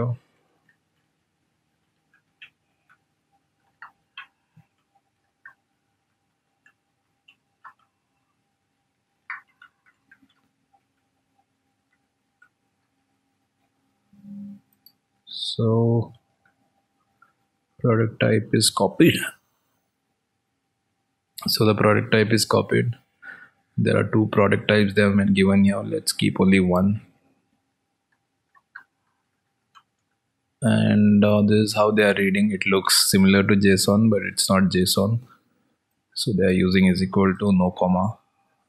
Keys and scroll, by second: 5.0 ctrl+v.